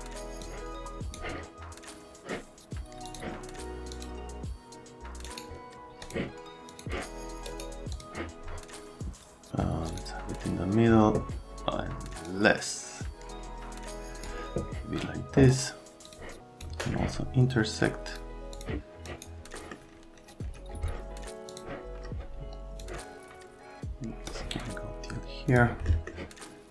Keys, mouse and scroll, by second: 0.4 click, 3.1 click, 3.9 click, 5.2 scroll up 1, 6.0 click, 6.7 click, 7.5 scroll up 1, 7.9 click, 9.9 click, 12.3 click, 16.1 click, 16.4 click, 18.1 click, 18.6 click, 19.1 click, 19.5 right click, 21.5 click, 22.8 click, 25.5 click, 25.9 right click.